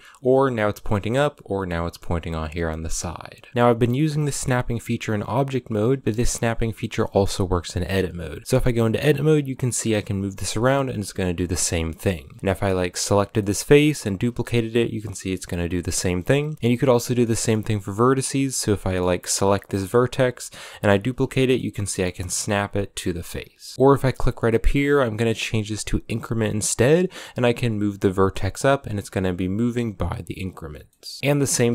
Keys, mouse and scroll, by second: 3.4-7.4 shift+middle drag, 7.4 Tab, 8.4 g, 11.4 scroll up 1, 12.3 2, 12.4 3, 12.5 right click, 13.2-13.6 middle drag, 13.6 shift+d, 15.7 middle click, 16.3 g, 16.5 1, 16.8 scroll up 1, 16.8-17.3 shift+middle drag, 17.3-18.2 scroll up 1, 18.2 right click, 18.6-20.2 shift+middle drag, 20.2 shift+d, 21.1 scroll down 5, 21.3 middle click, 22.0 g, 23.4-27.0 shift+middle drag, 27.0 g, 28.3 scroll down 4, 28.8 g, 30.7 middle click, 31.2 right click, 31.3 g.